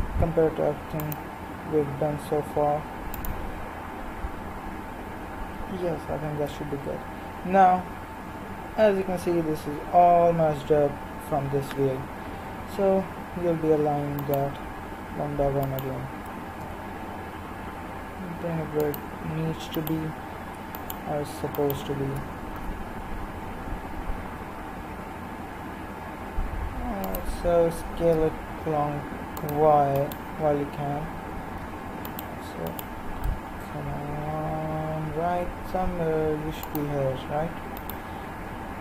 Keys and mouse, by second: 1.8 g, 6.4 KP_3, 14.2-18.8 right drag, 16.6 g, 19.7-23.7 right drag, 22.5 g, 27.7 s, 30.0-34.3 right drag, 33.6 g, 37.7-38.8 right drag.